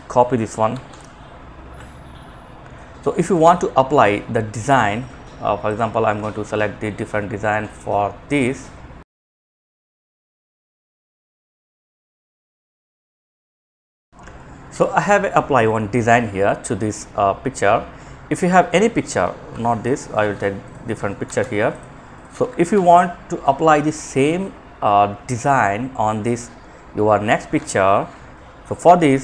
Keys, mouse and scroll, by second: 1.0 click, 2.5 click, 18.7 Delete, 19.0 click, 20.4 ctrl+c, 20.8 click, 21.9 ctrl+v, 22.6 click.